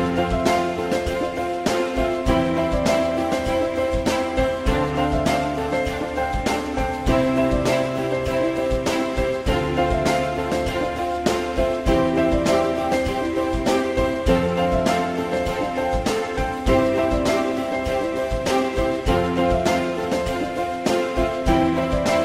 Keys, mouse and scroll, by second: 2.6 click, 3.1 F3, 4.8 F3, 8.3 alt+middle click, 15.4 shift+click, 17.1 ctrl+click, 17.8 ctrl+double click, 19.3 ctrl+click, 20.3 ctrl+BackSpace.